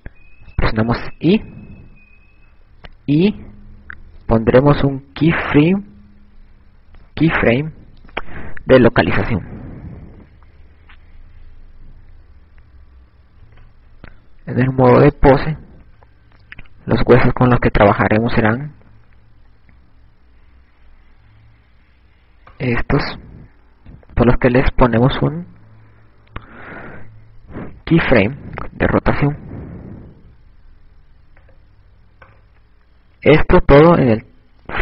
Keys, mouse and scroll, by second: 12.7 Tab, 17.8 KP_6, 23.0 right click, 30.6 right click, 31.4 i, 33.7 right click.